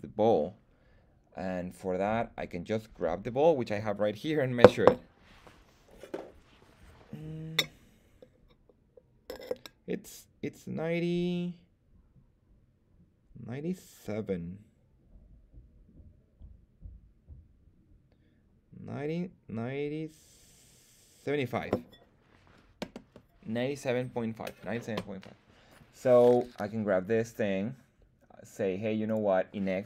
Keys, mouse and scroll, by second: 26.3 right click, 29.0-29.8 drag.